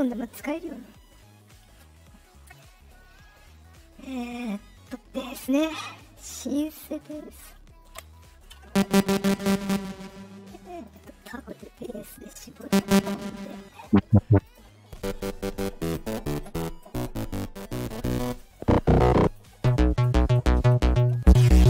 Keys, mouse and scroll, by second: 1.9-2.5 drag, 10.8 click, 11.7 click, 13.3 click, 14.3 click, 18.2 click, 19.2 click, 20.8 click.